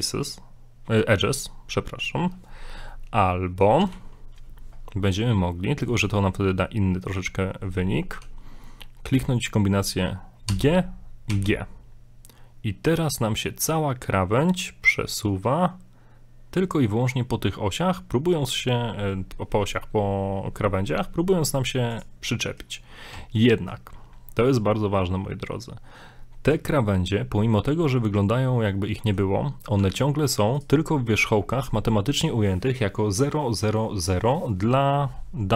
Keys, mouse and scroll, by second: 2.9 middle click, 3.9 ctrl+z, 10.5 g, 22.3 middle click, 23.1 a, 23.5 middle click, 24.0-24.7 scroll down 3, 24.9 scroll up 1, 26.5 Tab, 26.9 middle click, 29.4 scroll up 1, 29.8 Tab, 30.2 scroll up 1, 30.6 right click, 30.9 middle click, 31.4 shift+middle click.